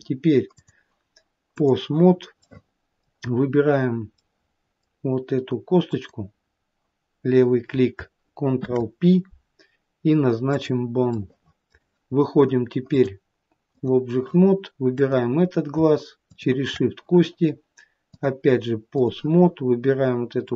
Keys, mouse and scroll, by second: 0.9 click, 2.5 scroll up 1, 2.7 middle click, 2.7-3.8 scroll down 1, 4.5 middle click, 6.1 click, 8.8 ctrl+p, 11.4 middle click, 12.0 middle click, 13.2 click, 15.2 click, 16.5 shift+click.